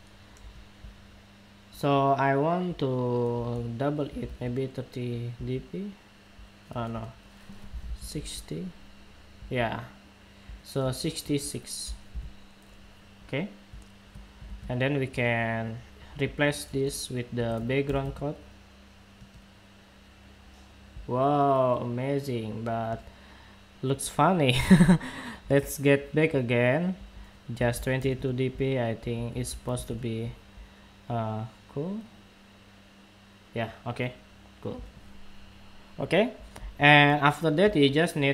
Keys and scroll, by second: 14.1 super+w.